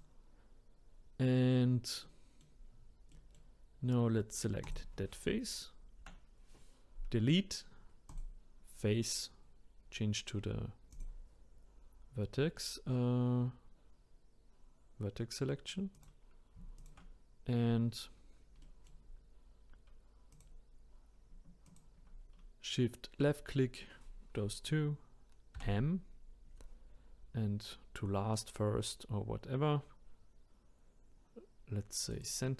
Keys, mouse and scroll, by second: 2.0 middle click, 2.7-3.1 scroll up 1, 3.1-4.6 middle drag, 4.6 click, 6.0 Delete, 10.9 click, 15.9 click, 16.8 shift+click, 18.6 middle click, 19.2-20.3 scroll up 1, 20.3 click, 21.6 shift+click, 25.6 m.